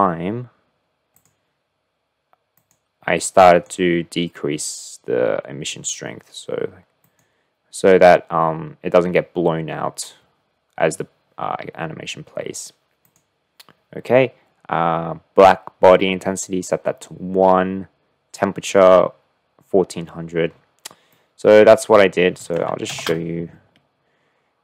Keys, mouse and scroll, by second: 1.1 click, 4.4-5.7 drag, 8.7-10.7 drag, 15.1-16.4 drag, 20.0-21.2 middle drag, 21.3 click, 22.0-22.7 middle drag.